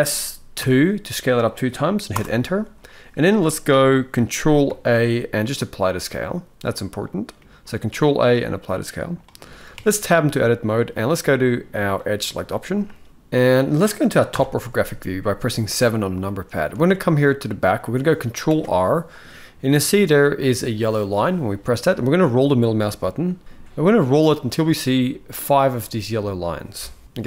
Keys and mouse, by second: 4.4 ctrl+a, 7.1 middle click, 9.5 Tab, 11.7 click, 13.1 middle click, 14.0 KP_7, 15.9 shift+middle drag, 16.4 alt+a, 18.2 ctrl+r.